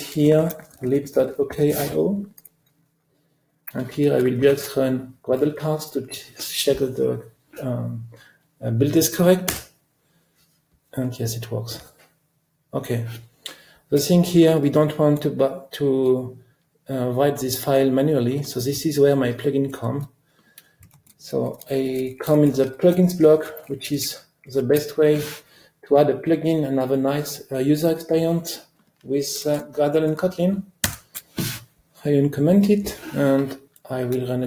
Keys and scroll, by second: 4.5 ctrl+alt+r, 23.7 alt+Up, 24.4 ctrl+alt+Down, 30.9 super+/.